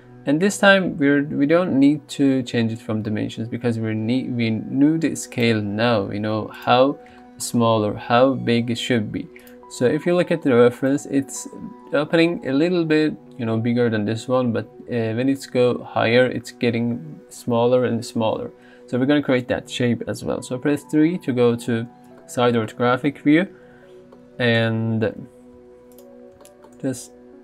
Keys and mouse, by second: 3.2 n, 4.0 s, 5.6 g, 6.0 z, 7.9 middle click, 9.0 s, 10.1 middle click, 20.8 KP_3, 22.2 middle drag, 23.3 KP_3, 24.2 shift+middle drag, 25.2 g, 25.6 z, 27.0 s.